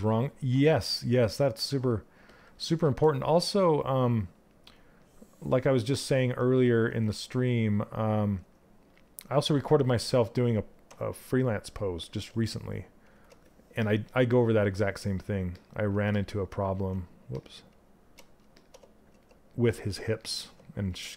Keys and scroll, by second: 16.2 ctrl+z.